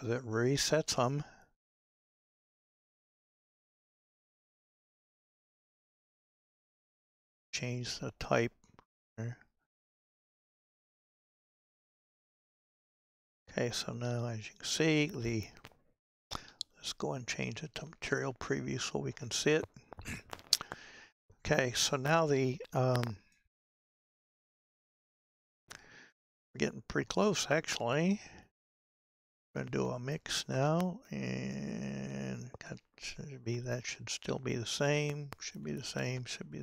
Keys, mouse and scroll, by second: 18.3 z, 19.2-20.0 scroll up 5, 20.0-20.5 scroll up 4, 23.4-30.6 middle drag, 30.6-36.6 drag.